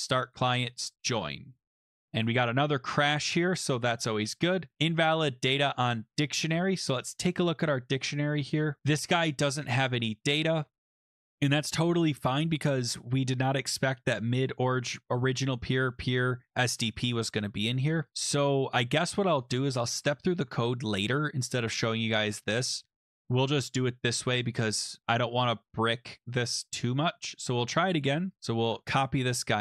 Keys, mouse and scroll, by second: 0.8 click, 2.2 click, 4.8 click, 5.7-6.4 scroll, 6.6 click, 6.9 scroll, 7.4 scroll down 4, 7.4 click, 7.9-8.8 scroll down 8, 11.1 scroll, 11.9-12.7 scroll, 13.7-15.8 scroll, 16.0-16.5 scroll, 19.4 click, 19.9 BackSpace, 20.3 ctrl+s, 23.0 click, 24.4 click, 25.0 click, 25.7 click, 26.5 click, 26.9 click, 28.3 click, 28.3 click, 28.6 ctrl+c, 29.0 click.